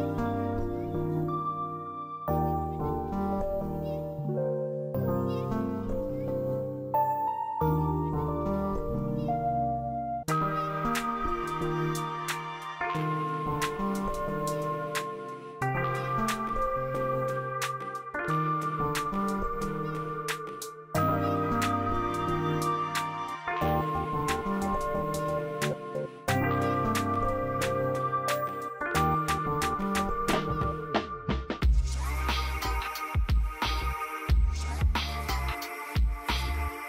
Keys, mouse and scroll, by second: 0.2 F2, 1.1-3.5 drag, 5.4 shift+click, 6.4 t, 7.9 click, 9.0 shift+click, 10.2 b, 11.1 click, 11.4 scroll down 1, 12.7-16.1 drag, 16.1 space, 16.8 click, 18.3 shift+click, 19.3 c, 20.1 click, 23.6 ctrl+u, 24.6-36.8 drag.